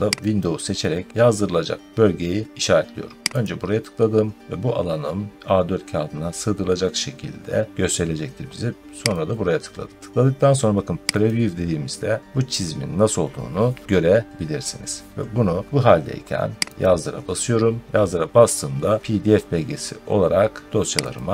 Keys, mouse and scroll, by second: 0.3 click, 3.3 click, 9.2 click, 11.1 click, 16.7 click, 21.0 click.